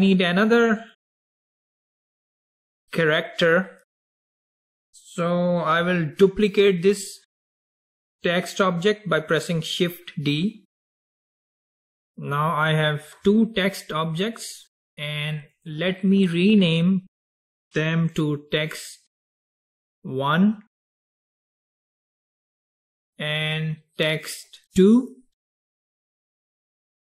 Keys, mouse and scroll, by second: 0.0-3.2 middle drag, 11.6 shift+d, 14.6 click, 14.9-17.9 drag, 22.4 click, 22.5-25.7 drag.